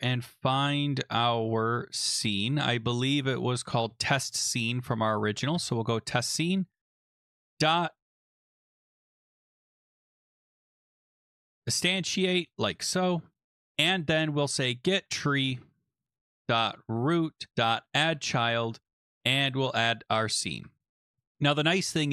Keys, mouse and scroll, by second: 0.3 Down, 0.5 Down, 0.7 Down, 0.8 Down, 1.0 Down, 1.6 Down, 3.6 Down, 3.8 Down, 4.0 Down, 4.2 Down, 4.4 Down, 4.6 Down, 4.9 Down, 5.5 Return, 6.1 Right, 7.4-21.1 typing.